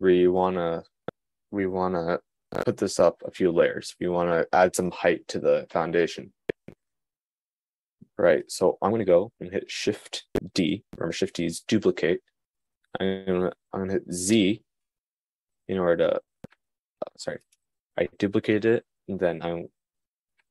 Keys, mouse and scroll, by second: 10.7 shift+d.